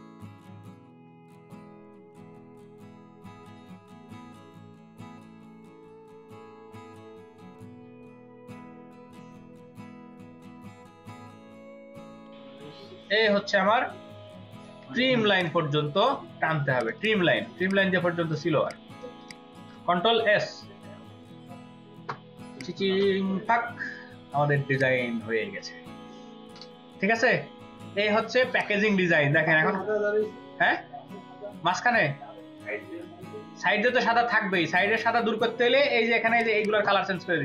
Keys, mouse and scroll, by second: 0.1 ctrl+t, 3.9 ctrl+z, 8.7 double click, 9.9 ctrl+t, 10.5 space, 10.6 ctrl+alt+click, 16.8 ctrl+click, 17.9-18.4 space, 19.2 ctrl+alt+click, 20.1 ctrl+s, 28.3 ctrl+space, 28.5 ctrl+click, 36.5 double click.